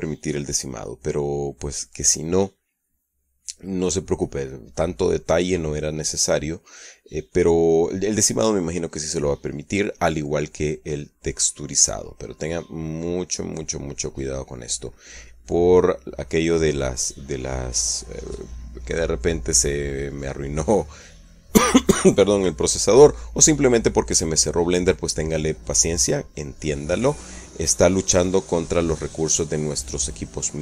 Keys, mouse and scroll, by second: 5.8-6.4 middle drag, 6.9-7.5 middle drag, 7.7-8.3 middle drag, 8.3-10.6 scroll up 1, 10.6-13.8 middle drag, 13.8-15.6 scroll up 1, 15.6-18.3 middle drag, 18.3 scroll up 1, 18.3-21.3 middle drag, 21.7-22.4 middle drag, 24.9-26.9 right drag, 27.9 right click.